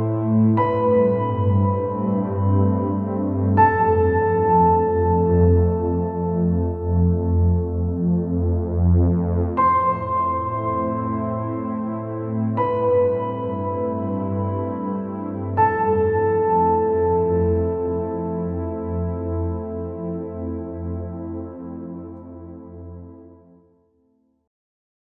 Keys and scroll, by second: 1.1 ctrl+-, 3.1 ctrl+=, 4.8 Down, 9.4 ctrl+[, 16.2 [, 23.5 Up.